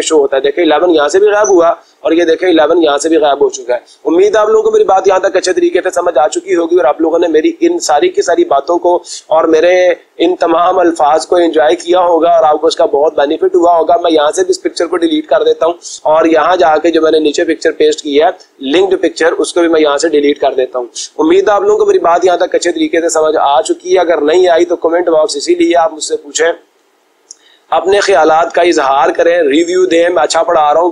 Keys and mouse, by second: 0.6-1.6 drag, 1.9-3.0 drag, 13.7 click, 14.5 Delete, 17.6-18.7 drag, 19.1 click, 20.0 Delete, 30.1-30.9 drag.